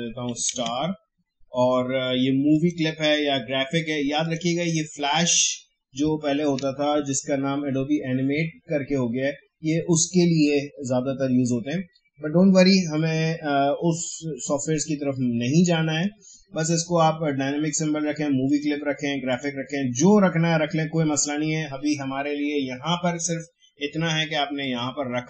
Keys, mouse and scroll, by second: 0.0-1.0 typing, 2.5 click, 18.4 click, 18.7 click, 24.6 click.